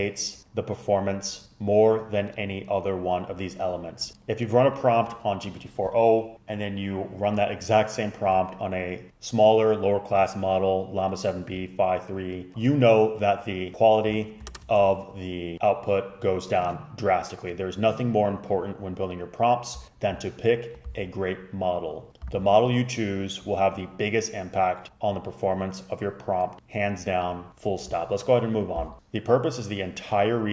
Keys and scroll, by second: 14.6 super+Return.